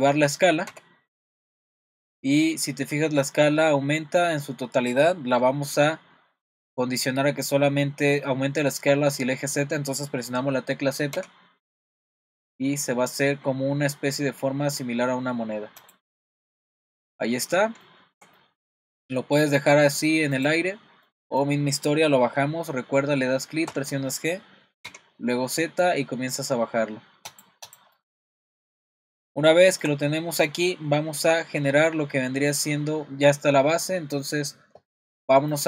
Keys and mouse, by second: 0.7 s, 16.5 click, 16.9 middle drag, 17.8-18.2 shift+middle drag, 18.4-20.0 middle drag, 20.3 click, 21.1 middle click, 23.7 g, 27.9-28.3 middle drag, 29.5-29.8 shift+middle drag.